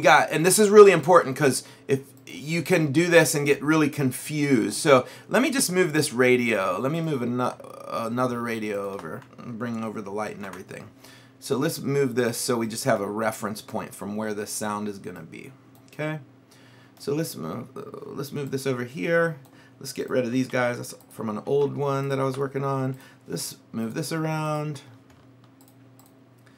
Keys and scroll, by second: 9.7 ctrl+c, 10.4 ctrl+v, 20.5 Delete.